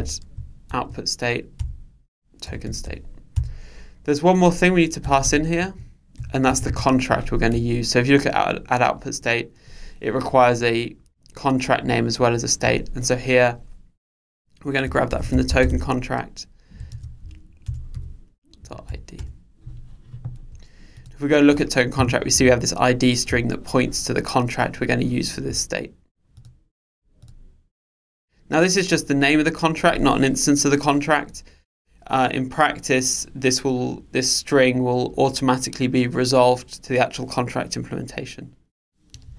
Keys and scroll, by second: 17.7 Return, 21.1 super+b.